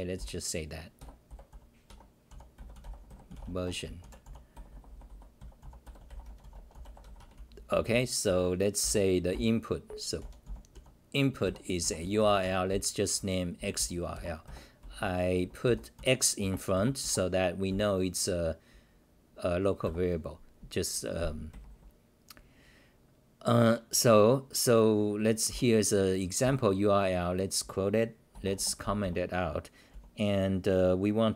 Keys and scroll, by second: 0.1 t, 1.0 g, 1.3 p, 1.9 Home, 2.3 u, 3.6 Home, 4.5-11.2 typing, 12.4 Home, 12.7-17.7 typing, 19.8 r, 21.5 d, 21.7 d, 25.5 t, 26.4 ;, 28.3-29.9 typing.